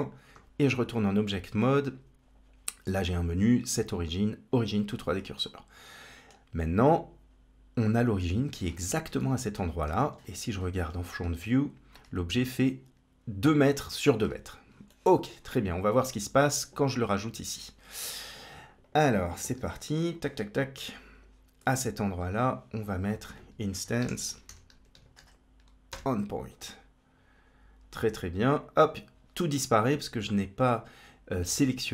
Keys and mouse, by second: 2.7-5.3 right drag, 5.3-6.1 middle drag, 9.1 middle click, 9.8 KP_1, 14.9-15.2 shift+middle drag, 15.6 click, 18.3 click, 18.7 click, 19.4 g, 20.6-21.1 drag, 22.0 shift+a, 24.8 Down, 31.4 shift+a.